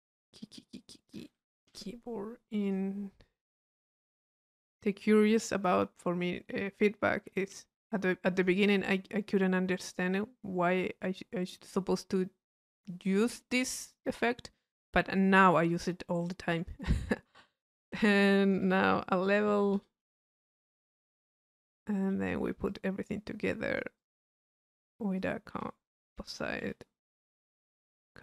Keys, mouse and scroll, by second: 2.7 click, 3.5 click, 3.9 click, 4.7 click, 5.5-7.9 drag, 9.8 click, 11.2-13.5 drag, 13.7 click, 16.5-18.9 drag, 20.9 click, 22.1 right click, 23.3-24.4 drag, 24.6 right click, 25.2 click, 27.2 click, 27.8 click.